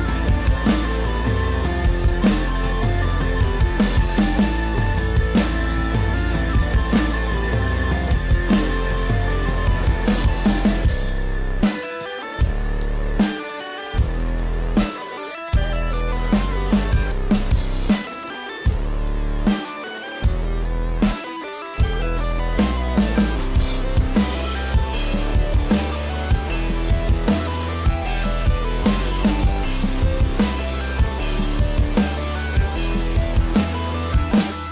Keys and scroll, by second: 1.7 ctrl+=, 2.0 ctrl+-, 2.4 ctrl+=, 2.4 ctrl+-, 4.6 ctrl+=, 5.2 space, 9.3 space, 10.3 ], 11.2 ], 16.1 ], 25.5 space.